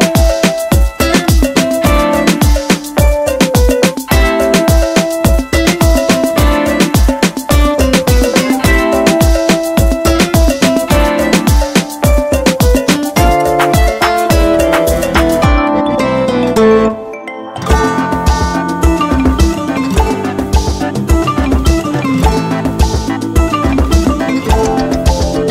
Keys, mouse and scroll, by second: 10.9 click, 11.0-13.4 drag, 24.0-25.5 drag.